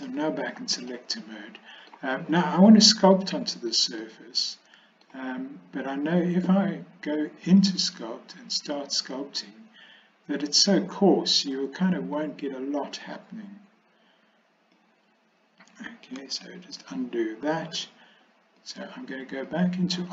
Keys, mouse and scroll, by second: 0.1 shift+middle click, 1.0 middle click, 4.1-5.1 middle drag, 7.5-8.9 drag, 12.2-14.8 drag, 16.3 ctrl+z, 18.7-19.7 drag.